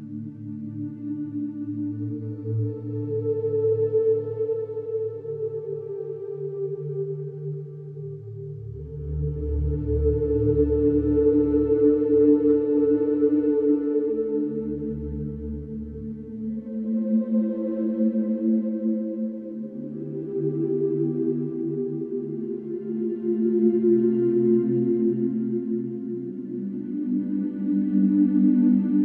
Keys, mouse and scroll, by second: 1.9-2.9 drag, 4.2-5.3 drag, 5.5-6.6 drag, 8.4 click, 9.4 click, 10.9 click, 12.7 Escape, 15.7 click, 17.7-19.9 drag, 19.9 Escape, 21.7-22.8 drag, 23.3-25.7 drag, 25.3-25.7 typing, 26.8 Return, 27.7 Escape.